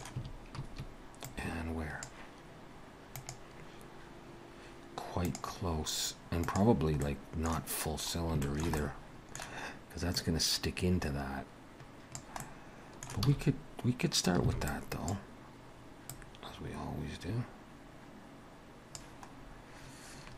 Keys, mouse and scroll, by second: 0.2 a, 1.3 click, 7.0 middle click, 7.9-8.3 scroll up 1, 8.5 shift+middle click, 8.8 middle click, 10.2 click, 12.4 middle click, 13.3 alt+a, 14.5 b, 16.1 click, 19.4 scroll down 1.